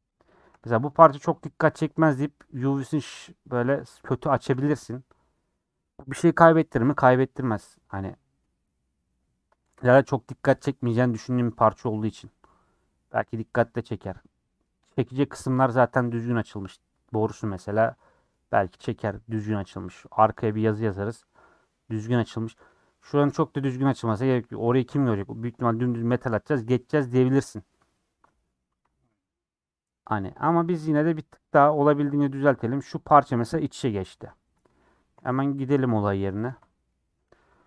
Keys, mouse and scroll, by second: 0.1 shift+click, 0.9-4.4 middle drag, 4.4 a, 4.6 u, 6.8-8.6 middle drag, 8.6-9.1 scroll up 1, 9.1-11.8 middle drag, 11.8 /, 12.0 scroll down 2, 12.3 middle click, 12.9 scroll up 2, 13.2 middle click, 14.0 scroll up 1, 17.5-29.5 middle drag, 29.5-29.9 scroll down 4, 29.9 middle click, 30.2 scroll up 1, 34.1 3, 34.6 Left, 35.1 l, 36.1 scroll up 1, 36.4 KP_Decimal, 36.9 middle click.